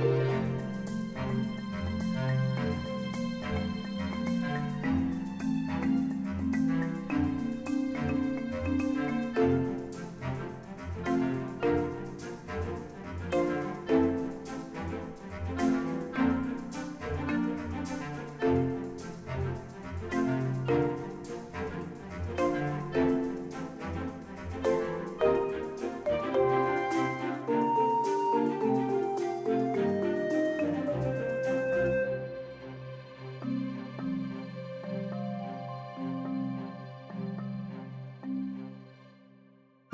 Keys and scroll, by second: 1.2 g, 1.5 x, 3.0 g, 3.2 x, 4.3 Tab, 5.1 Tab, 7.0 alt+a, 7.4 Tab, 8.1 Tab, 8.5 a, 8.8 Tab, 9.7 Tab, 11.4 ctrl+r, 12.2 ctrl+b, 14.6 alt+s, 18.4 ctrl+r, 19.9 ctrl+b, 21.4 alt+s, 24.0 ctrl+r, 24.6 shift+z, 25.7 shift+z, 26.9 ctrl+b, 28.1 alt+s, 29.9 2, 30.4 alt+a, 32.2 ctrl+b.